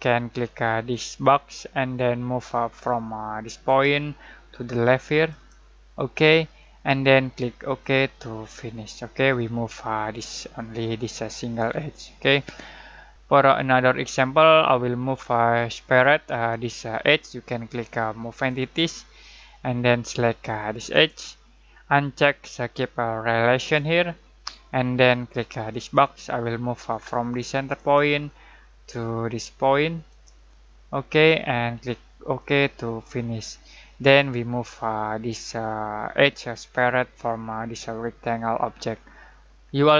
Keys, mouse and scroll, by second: 3.6 click, 7.8-8.7 drag, 18.3 click, 18.5 typing, 20.9 click, 23.5 click, 27.7 typing, 30.1 click, 32.3-33.3 drag, 33.3 typing, 36.1 typing.